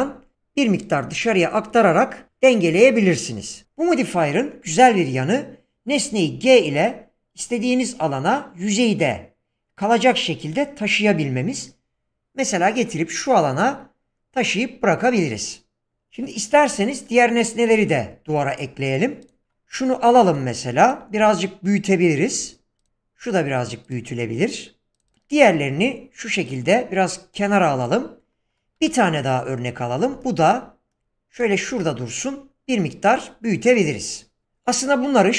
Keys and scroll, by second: 0.0 Return, 2.7 BackSpace, 5.9 g, 20.1 g, 21.2 s, 28.8 g, 31.7 s.